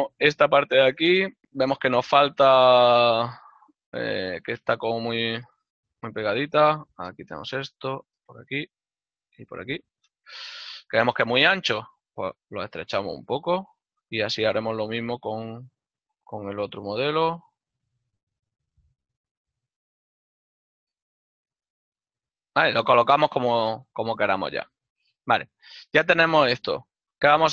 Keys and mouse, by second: 3.7 shift+right click, 11.2 KP_0, 12.3 x, 18.7 z, 25.0 right click, 27.3 ctrl+middle click.